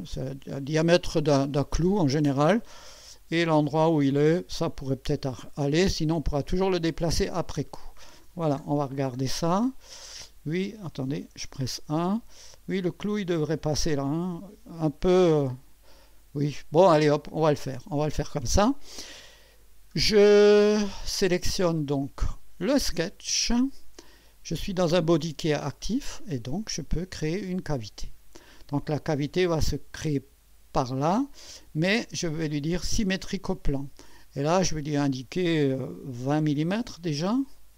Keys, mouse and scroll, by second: 0.5 click, 6.4 click, 7.5-8.3 drag, 8.6-9.2 scroll down 2, 9.4-10.9 drag, 11.2 1, 11.7-12.4 scroll up 2, 20.5 click, 21.8 scroll down 1, 27.7 click, 32.7 click, 34.6 click, 36.3 2, 36.7 0.